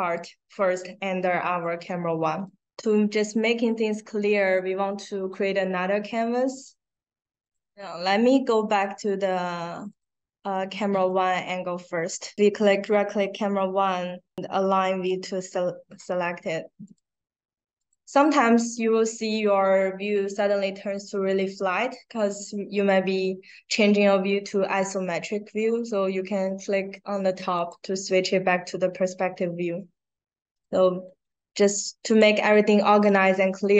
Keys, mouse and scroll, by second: 2.3 click, 3.4 click, 4.1 right click, 7.4 click, 9.8-10.3 drag, 10.4 click, 10.9 right click, 14.6 click, 16.8 click, 17.8 click, 27.6 click, 30.4 click, 31.6 click, 32.0 right click.